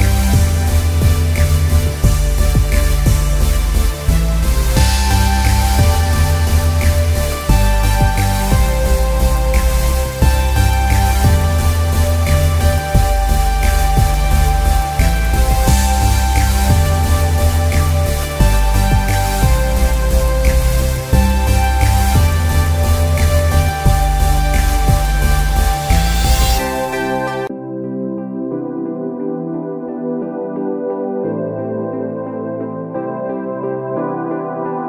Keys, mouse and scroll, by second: 0.9 ctrl+alt+q, 2.1 Tab, 4.7 scroll up 1, 7.5 click, 8.3-10.2 scroll up 1, 10.2 Return, 11.5 ctrl+u, 13.3-14.5 drag, 15.6 z, 16.6-18.8 drag, 19.3 ctrl+u, 21.0-24.7 drag, 24.7 Return, 25.2 space, 25.4 click, 25.7 space, 25.9 z, 26.2-28.8 drag, 28.8 alt+Tab, 29.9 click.